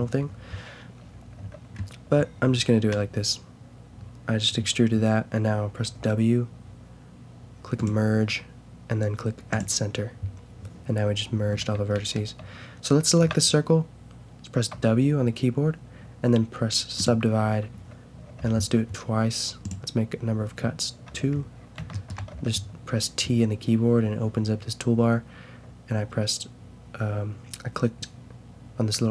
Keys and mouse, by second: 1.3 t, 1.8-4.7 middle drag, 5.9 w, 11.5 a, 11.9-14.7 drag, 13.2 a, 14.7 w, 17.4 w, 18.4 t, 19.6-21.0 drag, 21.1 t, 21.4 middle click, 21.5 click, 22.3 t.